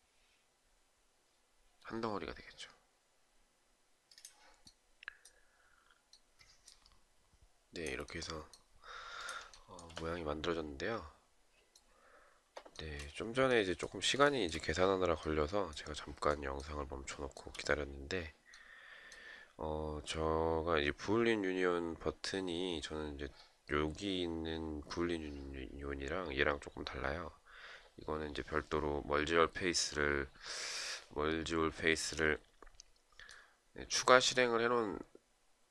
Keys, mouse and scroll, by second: 9.1 shift+right click, 12.3 shift+right click, 13.8 shift+right click, 16.6 shift+right click.